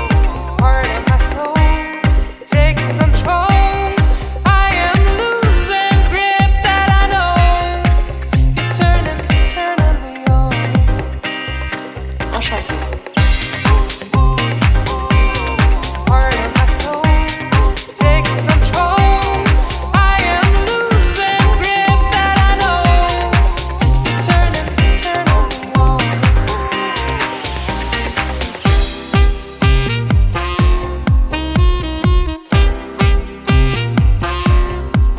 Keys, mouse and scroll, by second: 1.4 scroll down 1, 2.9 scroll down 4, 3.0 scroll up 1, 3.1 middle click, 3.7-4.6 scroll down 5, 4.4-5.3 scroll up 3, 4.8 middle click, 6.6 click, 9.6-10.3 scroll up 10, 10.2 middle click, 10.8 scroll down 1, 11.5 click, 13.9-14.4 scroll down 2, 14.3 scroll up 1, 15.4 scroll up 1, 16.0 scroll up 2, 16.1 middle click, 16.7 click, 18.8 middle click, 19.6 click, 21.4-21.9 scroll down 7, 22.7 click, 22.7 scroll down 3, 26.0-26.4 scroll up 5, 26.4 click, 29.6 click, 30.4 scroll down 1, 30.7 scroll up 1, 31.3 click, 32.5 click, 33.1-34.5 scroll down 2, 33.6 click.